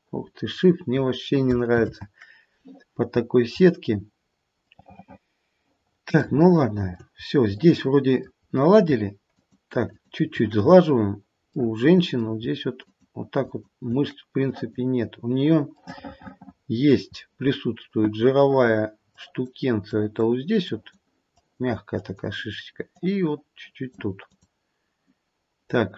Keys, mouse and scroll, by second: 1.9 ctrl+z, 3.1-4.3 scroll down 5, 4.3-4.7 scroll up 1, 4.7 middle click, 5.5 middle click, 5.7 middle click, 6.4 shift+middle click, 7.1-7.6 scroll up 2, 7.6 middle click, 8.3-9.4 scroll up 2, 9.4 shift+click, 9.9 shift+click, 11.5 middle click, 12.8 shift+click, 13.4 shift+click, 14.5 click, 15.8 middle click, 17.0-18.3 scroll up 2, 18.3 click, 19.1 click, 19.8 click, 20.6 click, 21.3 click, 21.9 click, 22.9 click, 24.3 click, 25.7-25.9 scroll down 2.